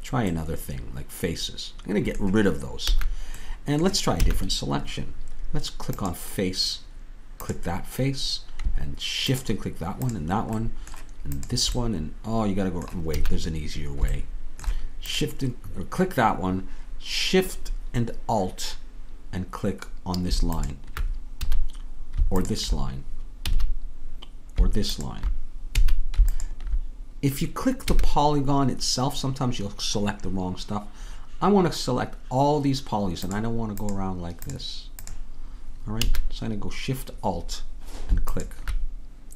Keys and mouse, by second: 1.7-2.9 middle drag, 2.9 a, 4.2 a, 7.0-13.1 drag, 12.3 middle click, 12.3 right click, 13.2 a, 21.4 a, 23.4 a, 33.7-39.3 drag, 36.1 a.